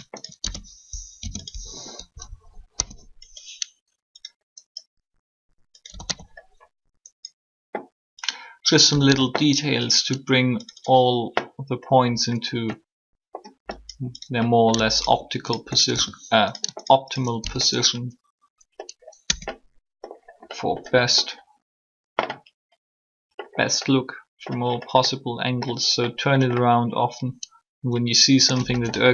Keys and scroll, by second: 1.0 shift+0, 2.7 3, 5.7-6.0 typing, 8.8 typing, 19.2 Tab.